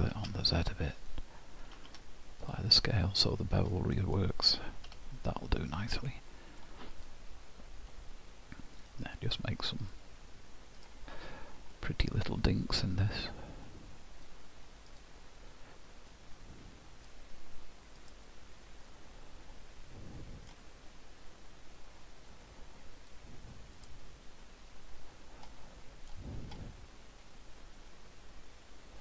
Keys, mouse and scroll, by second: 0.0 s, 1.8 ctrl+a, 3.7 scroll up 1, 4.2 scroll down 1, 4.9 h, 5.4 middle click, 7.0 click, 8.9 click, 11.8 middle click, 13.2 click, 16.1 click, 18.9 middle click, 21.9 click, 25.5 middle click, 27.9 click.